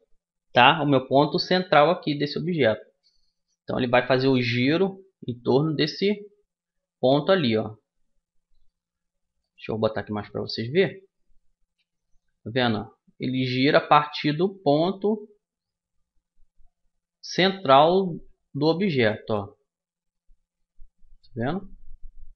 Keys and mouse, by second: 4.1-6.6 middle drag, 4.1 r, 11.5-13.3 middle drag, 11.5 r.